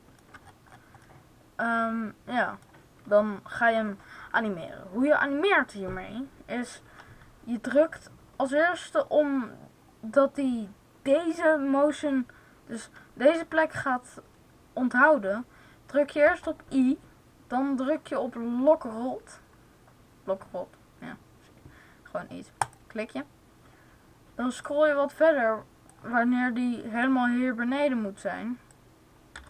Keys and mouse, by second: 2.8 middle click, 16.2 i, 24.5-26.9 drag, 28.5 click, 29.2 i.